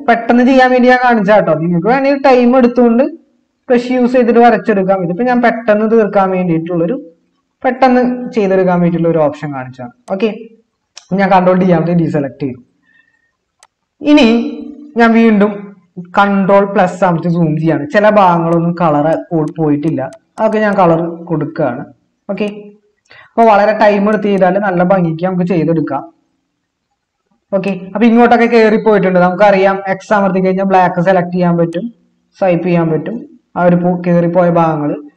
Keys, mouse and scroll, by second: 11.6 ctrl+d, 16.4 ctrl++, 30.4 typing.